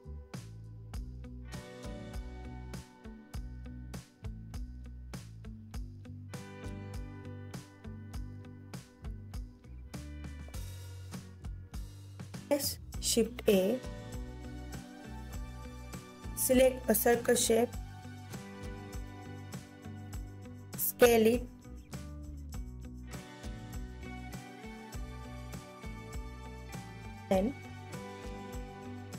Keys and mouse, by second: 5.4-7.5 alt+middle drag, 7.4 alt+click, 7.5 alt+click, 7.7 alt+middle click, 7.7-8.8 alt+drag, 10.2 Tab, 11.2 KP_1, 12.5 ctrl+a, 15.6 s, 18.4 click, 19.1 g, 20.4 click, 20.9 s, 23.8 click, 27.0 g.